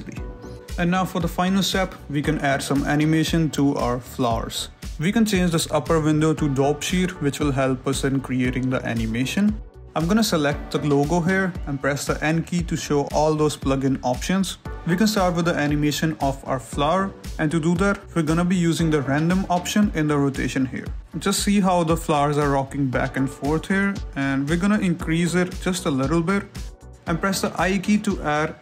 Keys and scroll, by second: 1.3 1, 1.5 Escape, 3.9 n, 8.1 Escape, 12.5 n, 17.1 z, 18.7 Escape, 27.3 i.